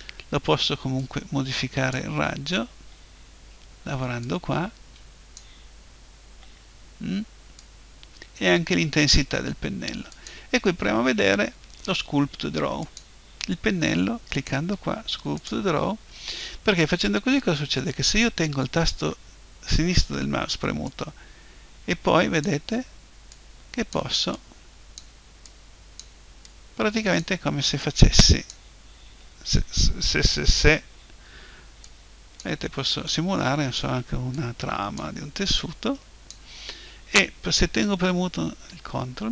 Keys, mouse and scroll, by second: 1.0-2.9 drag, 4.2-6.1 drag, 7.6-9.6 drag, 10.1-12.0 drag, 14.3-16.1 drag, 20.9-22.7 drag, 23.3-29.7 drag, 31.9-37.6 drag.